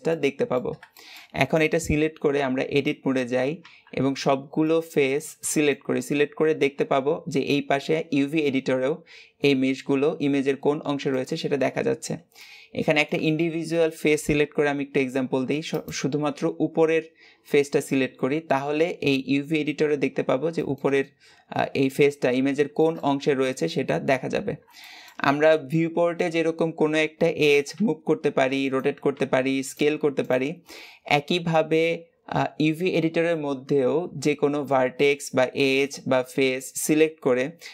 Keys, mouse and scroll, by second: 0.0-2.2 middle drag, 2.2 Tab, 3.2 scroll up 1, 3.5 a, 4.5-6.8 middle drag, 6.8 a, 12.3-15.7 middle drag, 15.7 click, 27.6 g, 29.8 s.